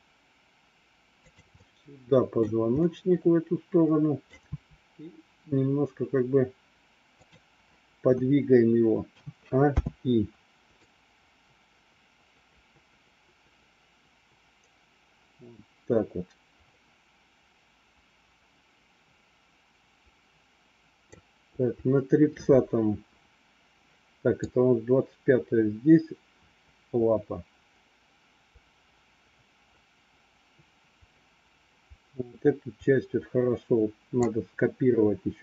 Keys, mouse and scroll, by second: 1.5 middle click, 2.8-4.3 middle drag, 4.4 r, 9.0 a, 9.8 i, 10.9-21.0 drag, 24.4-34.1 drag.